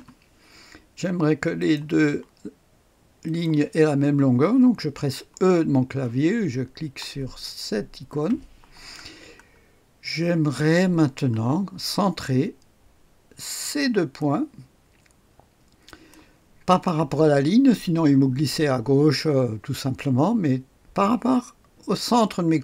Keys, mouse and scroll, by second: 0.0-0.1 typing, 1.5 click, 3.2 click, 8.1 typing, 9.0-10.1 scroll down 1, 10.3-11.0 scroll up 1, 11.0-12.0 scroll down 1, 13.5 click, 15.8 click.